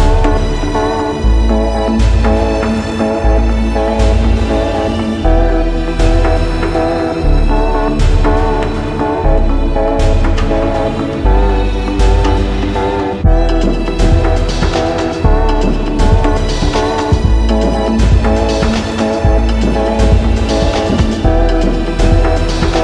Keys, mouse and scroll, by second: 0.0 click, 2.0 click, 2.5 alt+middle click, 2.5-3.7 alt+scroll up 17, 3.7 click, 4.1 ctrl+t, 5.5 shift+click, 6.8 right click, 7.9 click, 8.8 click, 9.6 click, 10.4 click, 10.9-12.0 scroll down 8, 12.2 Return, 13.3-14.6 scroll down 4, 15.3-16.3 scroll down 5, 16.9 click, 18.4 click, 19.7 alt+click, 20.1 ctrl+t, 22.3 shift+click.